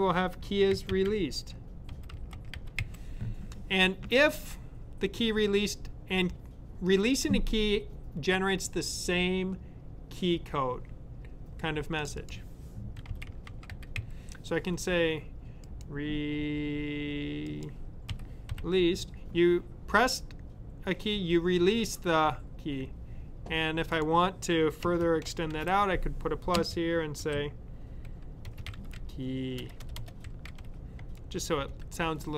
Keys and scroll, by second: 0.4-3.2 typing, 12.6-14.4 typing, 17.7-18.5 typing, 20.7 typing, 27.2 typing, 28.3-31.4 typing.